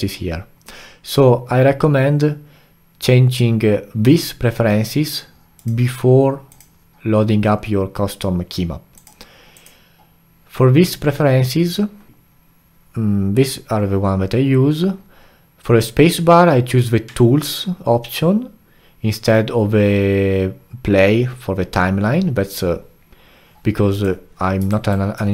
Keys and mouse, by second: 23.9 click, 24.7 alt+right drag.